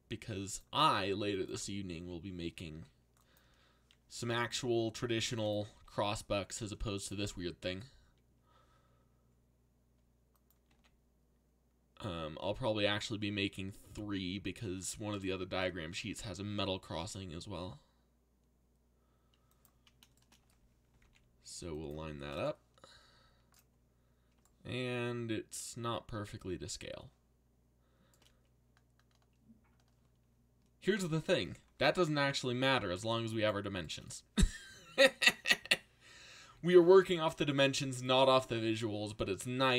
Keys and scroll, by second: 2.0 s, 3.4 g, 4.5 s, 5.7 g, 7.3 s, 10.7 g, 16.4 s, 20.6-21.5 typing, 32.4 z, 36.4 z.